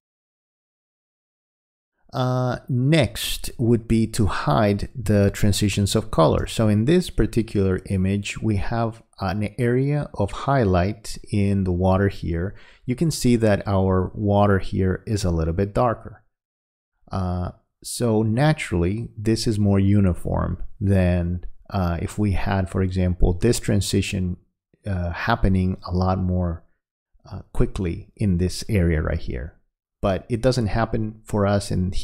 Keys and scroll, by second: 5.1 space.